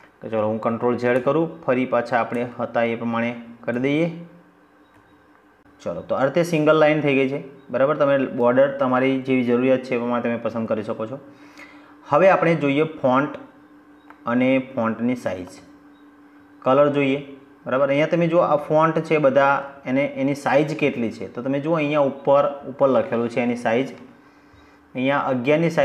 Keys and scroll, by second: 0.0 ctrl+z.